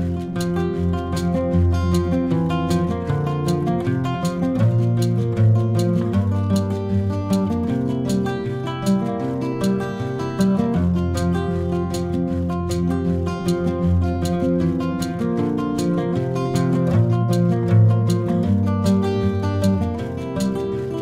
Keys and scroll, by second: 1.7 ctrl+z, 2.2 ctrl+z, 5.9 ctrl+z, 9.6 ctrl+shift+[, 11.5 ctrl+KP_Add, 11.5 ctrl++, 11.7 ctrl+KP_Add, 19.3 ctrl++, 19.3 ctrl+KP_Add, 19.5 ctrl++, 19.9 ctrl+c.